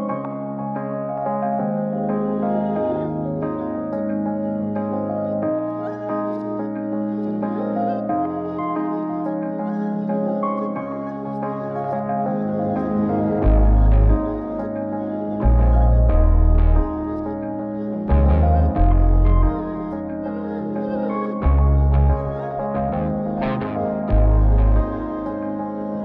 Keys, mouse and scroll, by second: 1.7 click, 2.2 g, 3.6 r, 6.2 click, 6.5 g, 9.3 n, 10.0 n, 10.2-16.8 drag, 17.4 click, 18.3 g, 20.0 g, 22.4 r, 24.5-25.7 drag.